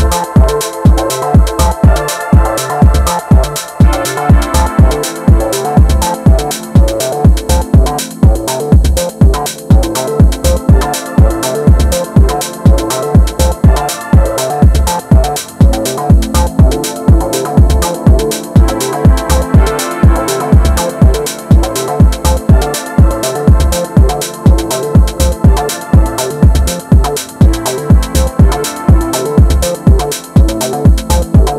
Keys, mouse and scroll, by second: 1.5 click, 2.2-3.7 middle drag, 3.7 ctrl+shift+click, 4.6 g, 6.4-7.4 middle drag, 7.4 Tab, 7.7 scroll down 1, 7.9-10.0 middle drag, 10.0 scroll up 1, 10.3 Tab, 10.9 shift+middle click, 11.6 alt+click, 13.1 KP_6, 14.7 r, 16.1-17.4 middle drag, 17.4 Tab, 17.7-18.7 middle drag, 18.7 scroll up 2, 18.8 Tab, 19.2-22.3 middle drag, 23.4 click, 24.2 shift+click, 24.8 shift+click, 25.4 shift+click, 26.4 click, 27.1-28.8 middle drag, 28.8 alt+z, 29.1-30.2 middle drag, 30.2 click, 30.9 shift+click.